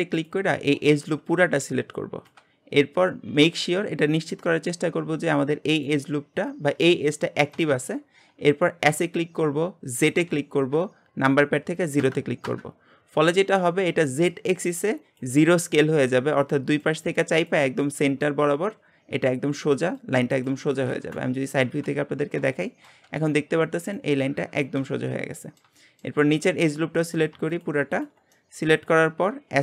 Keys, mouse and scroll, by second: 0.1 alt+click, 2.7-7.5 scroll up 1, 8.9 s, 21.1 KP_1, 21.7 KP_3, 22.6-25.0 shift+middle drag, 25.0-25.4 scroll down 2, 25.4-26.8 middle drag, 26.8 scroll up 1, 27.1 click, 27.5 alt+shift+click, 27.9 alt+shift+click, 28.3 shift+middle click, 29.2-29.6 scroll up 1.